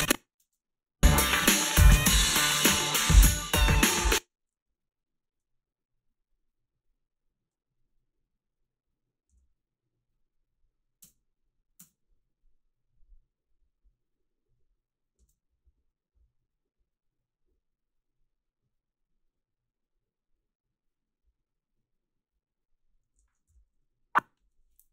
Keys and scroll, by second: 0.4 space, 3.9 space, 9.3 f, 11.0 space, 11.8 space, 15.2 space, 23.5 i.